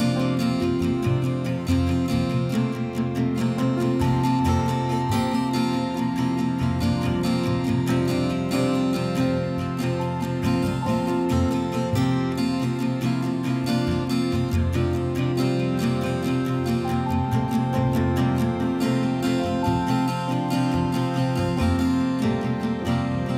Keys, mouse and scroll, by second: 3.2 click, 4.5-5.0 typing, 6.6-9.4 typing, 10.0 right click, 11.6-13.2 typing, 13.2 right click, 15.2 click, 16.3-17.4 typing, 18.4 click, 19.5-22.4 typing, 22.6 right click.